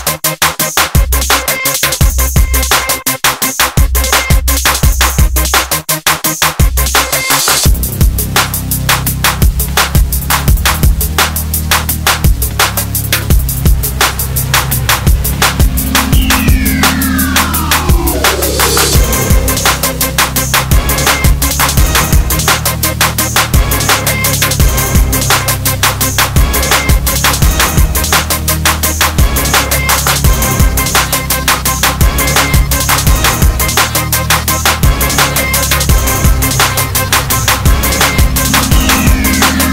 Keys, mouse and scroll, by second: 17.8 click, 18.0 middle click, 18.2 middle click, 18.8 click, 18.8 click, 19.2 click, 19.8 middle click, 21.3 ctrl+right click, 22.0 click, 22.5 click, 22.9 shift+middle click, 23.2 ctrl+middle click, 23.2 middle click, 23.7 middle click, 24.0 ctrl+right click, 24.5 click, 24.8 middle click, 25.2 click, 25.4 click, 25.7 ctrl+i, 25.9 click, 26.0 middle click, 26.3 ctrl+right click, 26.7 click, 27.1 click, 28.4 click, 28.9 click, 29.0 click, 29.1 middle click, 29.2 shift+middle click, 30.1 shift+right click, 30.3 click, 30.5 click, 30.7 click, 30.9 click, 31.0 middle click, 31.2 ctrl+right click, 31.7 click, 32.7 click, 33.3 click, 33.5 click, 34.1 click, 34.2 click, 34.4 middle click, 34.6 ctrl+middle click, 35.3 click, 35.5 click, 35.6 BackSpace, 35.6 8, 36.0 Return, 36.2 click, 36.3 click, 36.5 click, 36.7 click, 36.7 click, 37.0 s, 37.2 click, 37.3 click, 37.6 click, 37.7 middle click, 37.9 r, 38.0 click, 38.3 middle click, 38.5 click, 38.8 middle click, 39.3 click, 39.5 scroll down 3.